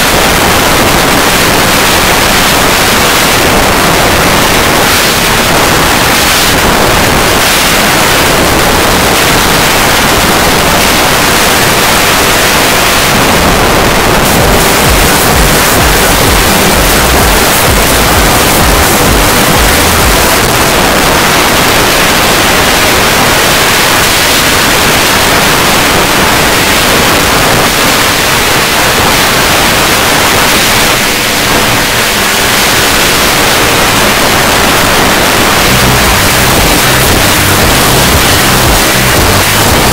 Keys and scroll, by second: 20.3 Page_Down.